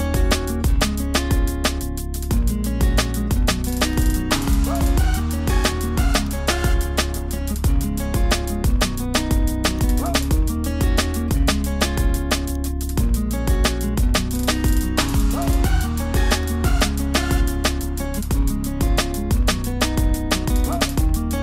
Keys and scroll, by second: 2.4 super+t, 14.8 super+j.